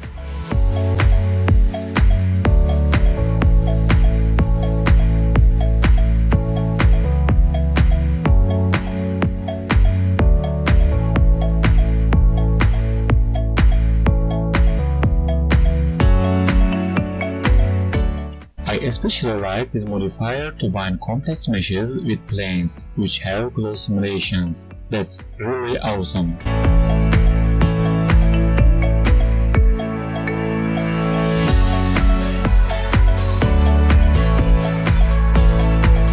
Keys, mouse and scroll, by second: 0.5 click, 0.7 Tab, 1.0 alt+click, 1.4 r, 2.4 Tab, 3.0 right click, 5.2 Tab, 5.6 alt+click, 6.9 click, 7.8 click, 8.5 click, 9.2 Tab, 10.0 click, 13.5 click, 15.0 click, 15.4-17.5 scroll down 18, 17.5 click, 19.0 click, 20.5-21.2 scroll down 1, 21.2-22.5 scroll down 4, 22.5 click, 22.5-22.9 scroll down 1, 22.9-24.1 scroll up 4, 24.1 click, 24.1 scroll up 2, 24.8 space, 26.1 scroll down 2, 26.3 alt+right click, 26.9-27.3 scroll up 1, 31.7 click, 34.7 space, 35.3 click, 35.7 right click.